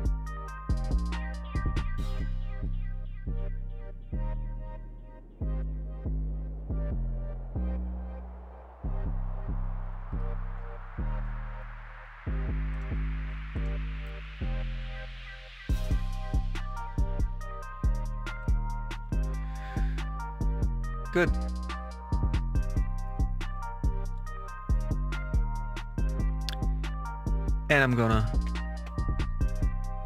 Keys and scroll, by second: 2.1 y, 14.6 y, 18.0 Return.